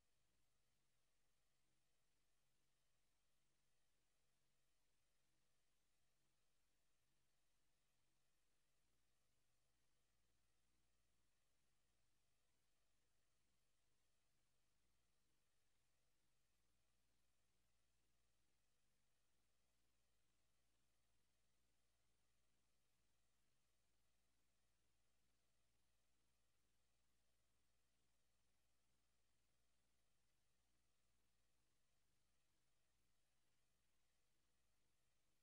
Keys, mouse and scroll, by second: 0.6 click, 9.8 click, 19.1 click, 32.3 click, 33.1 click.